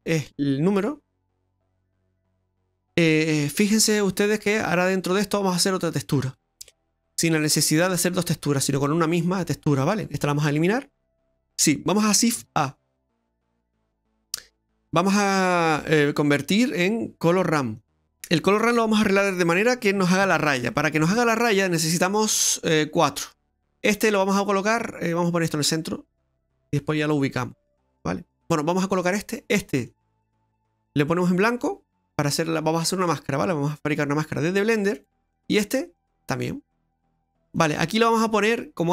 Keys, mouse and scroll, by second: 1.0 scroll down 3, 1.2 middle click, 6.1 middle click, 8.7 click, 10.6 click, 12.4 shift+a, 18.0-18.5 scroll up 2, 20.8-21.5 scroll up 8, 21.5 middle click, 22.8 click, 23.2 click, 25.5 click, 26.6 click, 27.8 click, 28.8 click, 29.9 click, 30.4 click, 31.1 click, 33.8 click, 35.0 click, 37.5 click.